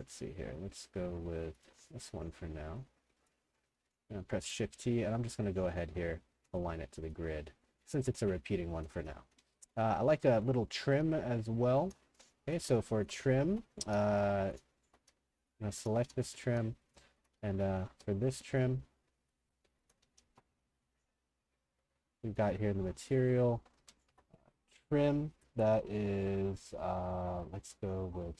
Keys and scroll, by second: 3.9 w, 4.4 shift+t, 7.4-10.8 typing, 12.1-17.9 typing, 19.8-21.1 typing, 23.4-24.7 typing, 27.4-28.3 typing.